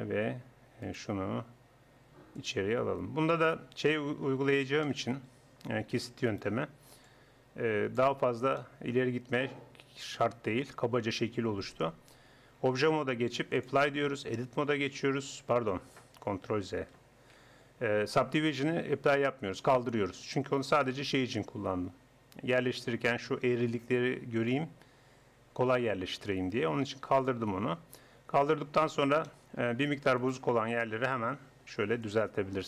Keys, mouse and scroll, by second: 0.8-2.6 right drag, 2.4-4.1 drag, 6.3-8.0 right drag, 7.0-9.0 drag, 12.6 Tab, 14.2 Tab, 15.6 Tab, 16.5 ctrl+z, 17.0 ctrl+z, 20.6-24.1 middle drag, 27.2-28.3 drag, 28.3 Tab, 28.8 middle click, 30.2-31.2 drag, 31.2 g.